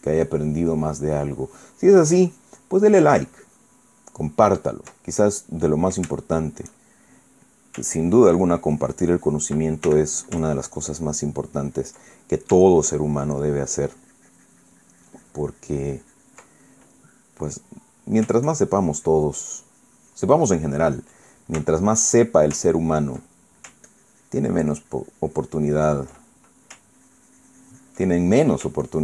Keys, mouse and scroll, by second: 5.8 ctrl+middle click, 6.8 shift+middle click, 7.7 shift+middle click, 7.9 click, 8.6-10.3 ctrl+drag, 10.6 ctrl+f, 10.9-12.8 ctrl+drag, 12.8 ctrl+middle click, 13.5-17.2 ctrl+drag, 17.2-19.1 ctrl+middle drag, 19.2-21.9 ctrl+drag, 21.9 ctrl+middle click, 22.6 ctrl+shift+middle click, 22.9 ctrl+shift+middle click, 23.4 ctrl+shift+click, 24.0 ctrl+middle click, 24.6-26.9 ctrl+drag, 27.0 ctrl+middle click, 27.7-28.8 ctrl+drag, 28.9 ctrl+middle click.